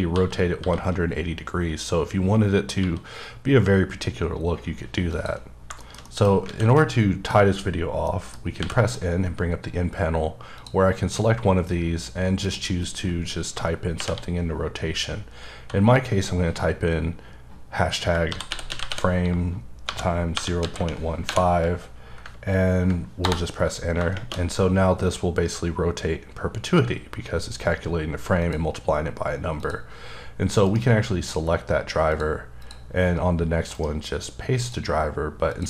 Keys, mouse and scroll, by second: 0.0-0.6 typing, 2.8 f, 5.1 click, 5.5 scroll down 2, 5.8 shift+middle click, 6.1 double middle click, 6.5 alt+a, 6.7 middle click, 7.4 scroll up 1, 8.0 middle click, 8.6 n, 10.6 click, 12.4 click, 14.0 shift+#, 18.3-21.3 typing, 23.2 Return, 28.4 click, 29.6 click, 30.6 right click, 32.1 click, 32.6 click, 33.7 right click, 34.6 click, 35.5 click.